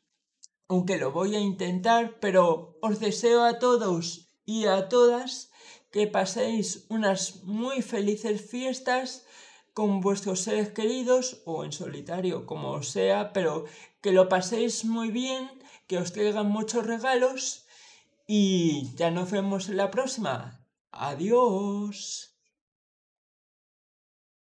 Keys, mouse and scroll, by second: 24.4 click.